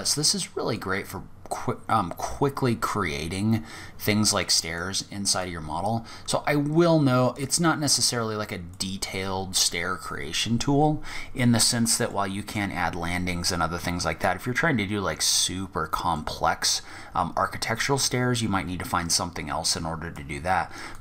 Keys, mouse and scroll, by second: 0.7 click, 4.6 click, 11.3 middle click, 12.2-13.7 scroll up 4, 15.0-15.5 scroll down 2, 15.3 middle click, 17.0 click, 20.1 click.